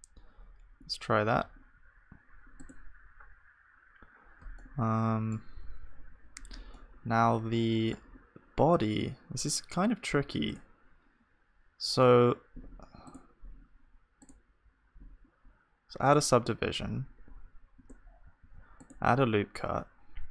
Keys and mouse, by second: 0.2 z, 1.4 z, 4.6-15.1 middle drag, 17.8 Tab, 17.8 click, 18.4 ctrl+r.